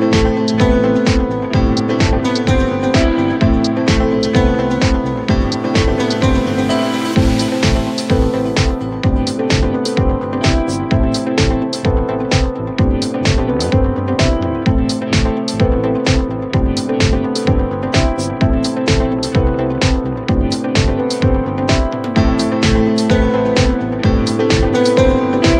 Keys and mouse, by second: 0.0 alt+middle click, 0.8 alt+middle click, 1.2 alt+click, 1.7 3, 2.6 click, 3.1 middle click, 3.4 click, 3.6 alt+click, 6.9 r, 7.3 r, 7.8 click, 8.9 alt+middle click, 9.6 alt+middle click, 10.1 alt+middle click, 11.5 alt+click, 11.9 w, 12.3 click, 13.0-15.0 right drag, 15.1 alt+click, 15.6 r, 16.2 click, 21.3 click.